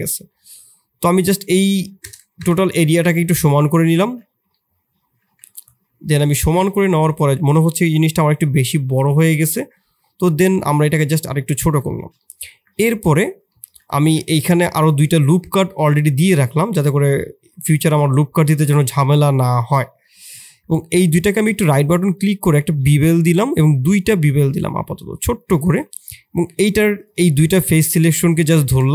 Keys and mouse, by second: 3.1 shift+z, 3.5 middle click, 4.1 shift+z, 4.6 middle click, 5.2 Tab, 5.5 middle click, 6.4 Tab, 9.5-11.4 drag, 11.4 Tab, 11.8 shift+click, 12.1 click, 12.4 Tab, 13.0 3, 13.4 click, 13.9 ctrl+r, 15.7 middle click, 16.8 middle click, 20.0 middle click, 20.7 shift+click, 25.7 middle click, 26.3 3, 27.1 click, 28.3 shift+click.